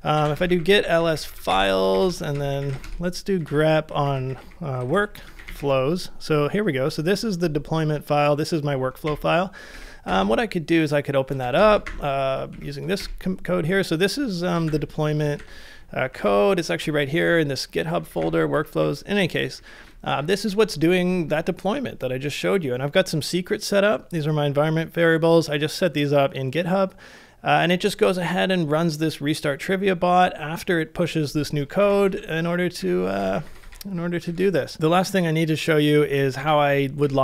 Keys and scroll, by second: 0.0-4.9 typing, 9.1 Up, 9.7-10.0 typing, 14.4-16.8 typing, 14.5 Return, 17.8-20.4 typing, 18.1 ctrl+w, 21.9 typing, 31.8-34.1 typing, 34.3 ctrl+c, 36.0-37.2 typing, 37.0 Return.